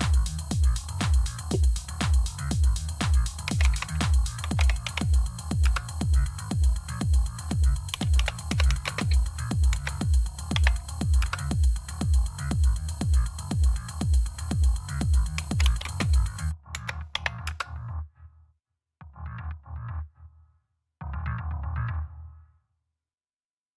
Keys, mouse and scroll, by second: 1.6 click, 2.1 click, 3.1-5.2 typing, 5.5 Return, 7.6-11.8 typing, 15.3-17.3 typing.